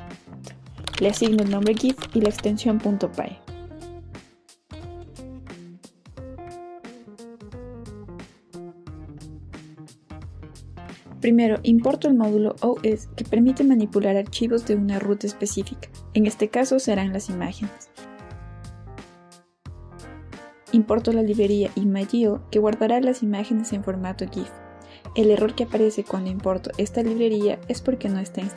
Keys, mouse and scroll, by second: 0.7-3.5 typing, 4.8 Return, 9.9-13.5 typing, 15.0 Return, 20.5 Return, 21.4-25.0 typing, 27.6 click.